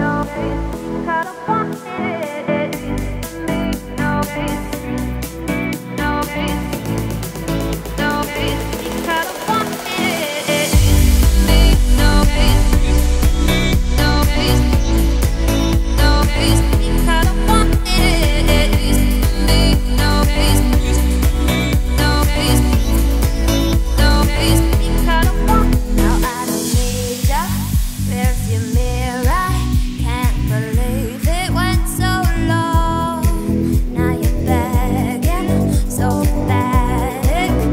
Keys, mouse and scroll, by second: 0.0 click, 0.7 g, 1.7 z, 2.1 middle click, 2.4-3.2 scroll up 2, 3.2 click, 3.9 ctrl+b, 7.3 click, 7.6 g, 9.0 scroll down 2, 9.1 middle click, 9.7 click, 10.0 scroll up 1, 10.2 middle click, 10.7 ctrl+b, 12.6 click, 13.0 middle click, 13.3 g, 14.6 middle click, 15.3 click, 15.5 2, 15.7 click, 16.4 ctrl+b, 17.8 1, 18.4 click, 18.8 g, 19.9 middle click, 20.6 scroll up 1, 20.9 middle click, 21.8 click, 22.7 click, 23.1 2, 23.2 click, 23.5 middle click, 23.8-24.1 scroll up 1, 24.1 ctrl+b, 25.2 1, 25.6 click, 25.8 g, 26.6 middle click, 27.1-27.4 scroll up 2, 27.8 click, 28.1 g, 30.9 click, 31.2 g, 32.3-32.7 scroll down 2, 32.7 middle click, 33.3 scroll up 2, 33.7 scroll down 1, 33.8 middle click, 34.3 scroll up 1, 34.6 2, 35.0-36.2 middle drag, 36.2 click, 36.4-37.7 middle drag.